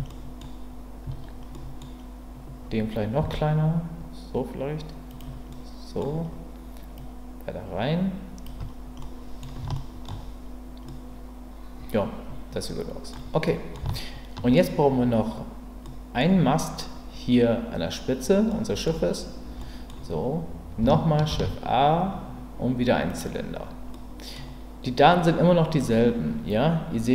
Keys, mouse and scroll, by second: 0.1-0.5 scroll up 1, 0.5 middle click, 1.5-2.0 scroll up 1, 3.2 s, 5.1 click, 5.5-6.0 middle drag, 7.0-8.4 drag, 9.0-9.4 scroll up 1, 9.4 middle drag, 9.7-10.1 shift+scroll up 1, 10.9-13.1 middle drag, 13.4 middle click, 13.9-14.5 shift+middle drag, 15.8-16.2 scroll up 1, 16.2-18.5 scroll down 1, 18.5-18.8 scroll up 1, 19.6-20.0 middle drag, 21.3 shift+a, 24.1 middle click.